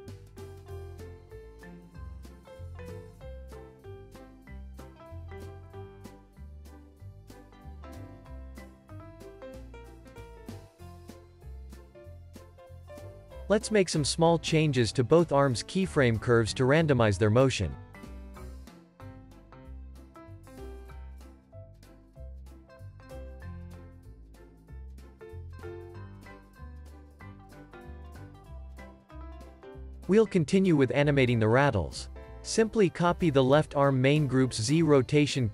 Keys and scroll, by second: 6.4 space, 6.9 super+s, 9.4 alt+q, 9.8 super+s, 10.5 z, 13.3 super+s, 24.1 space, 27.5 space, 27.9 super+s, 34.4 x.